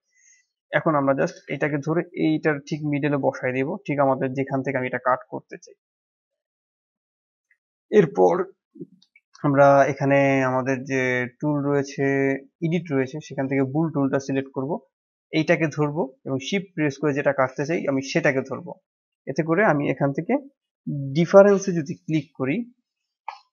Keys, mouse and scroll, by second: 0.4 click, 1.2 g, 3.2-3.9 middle drag, 3.9 KP_7, 4.4-5.4 scroll up 2, 5.4 click, 6.6 scroll down 2, 6.8-7.7 middle drag, 7.7 click, 9.6 n, 11.1 click, 12.6-14.2 drag, 14.2-15.3 middle drag, 15.3 click, 18.0 shift+click, 23.2 click.